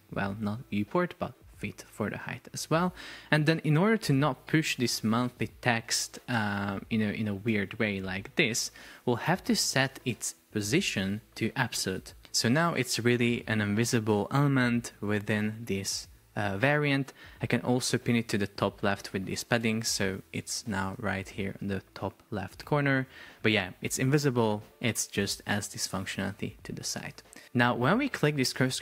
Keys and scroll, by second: 0.3 super+z, 4.5 Up, 6.7 Up, 7.2 Down, 7.5 Escape, 7.9 Up, 8.4 Down, 17.3 alt+a, 17.8 alt+w, 19.6 Return, 21.0 shift+super+4, 22.7 Escape.